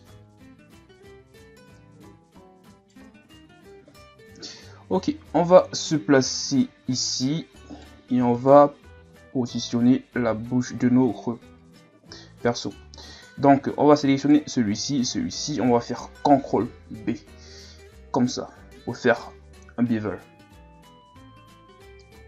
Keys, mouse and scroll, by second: 0.4 KP_1, 0.9-1.7 scroll up 2, 1.7 scroll up 1, 1.8 right click, 3.1 Tab, 4.5 Tab, 5.0 scroll down 1, 5.3-6.5 scroll up 2, 6.5-6.9 ctrl+scroll up 3, 6.9-7.7 scroll down 3, 7.7 right click, 8.4 shift+right click, 9.1-9.8 scroll down 1, 9.9-12.9 drag, 13.0-13.9 scroll down 2, 14.3 right click, 15.0 shift+right click, 17.0 ctrl+b.